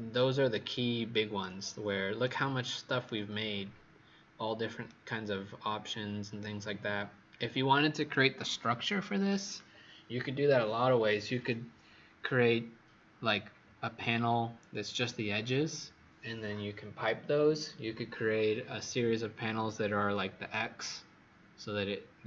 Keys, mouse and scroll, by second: 2.1 right click, 3.4-4.3 scroll up 4, 4.3 scroll down 1, 4.4-4.8 scroll down 1.